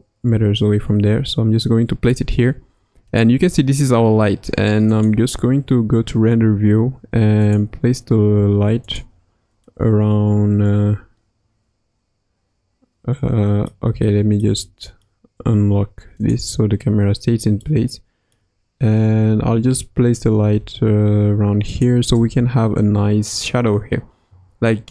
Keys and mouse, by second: 3.1 click, 5.0-6.4 drag, 6.4 g, 8.2 g, 9.6-13.7 middle drag, 14.0-14.5 shift+middle drag, 14.7 middle click, 16.2 click, 17.6-18.4 middle drag, 19.3 g, 22.1 KP_0.